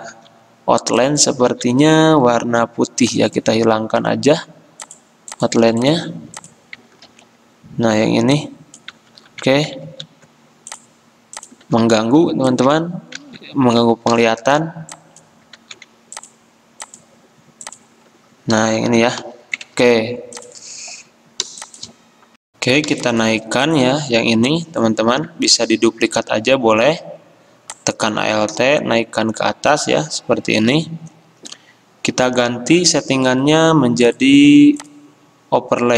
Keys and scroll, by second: 0.3 ctrl+z, 1.6 ctrl+z, 7.3 ctrl+3, 9.2 ctrl+z, 9.9 ctrl+z, 13.3 ctrl+z, 14.3 ctrl+2, 15.7 ctrl+z, 19.3 ctrl+3, 22.5 Delete, 25.2 ctrl+z.